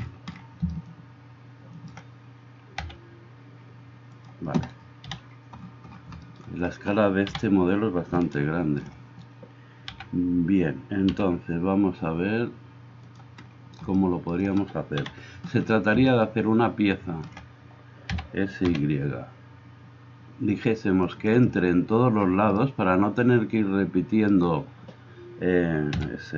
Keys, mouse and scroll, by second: 2.8 s, 5.0 KP_7, 10.0 g, 11.2 g, 15.1 KP_7, 25.9 s.